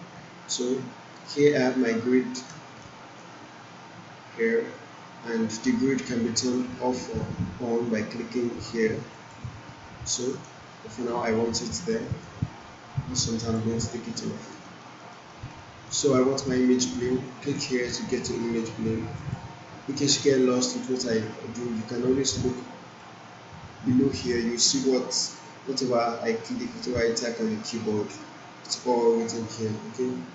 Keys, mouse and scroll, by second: 0.6-1.5 alt+middle drag, 2.8-3.4 alt+middle drag, 9.1 click, 11.7-12.3 alt+middle drag, 13.4 click, 14.6-15.5 alt+middle click, 19.1 click, 22.9 click, 26.5 click, 27.9 w.